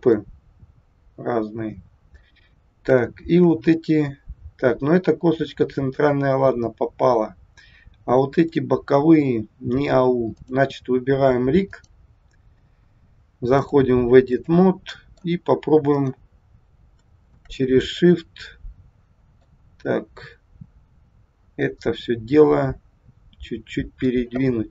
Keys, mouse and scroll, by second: 0.2 middle click, 2.5-2.8 scroll up 2, 3.1 shift+middle click, 3.8 middle click, 10.3 click, 11.7 click, 13.6 click, 15.0 middle click, 15.9 click, 17.2 shift+click, 18.1 middle click, 21.6 click, 24.6 middle click.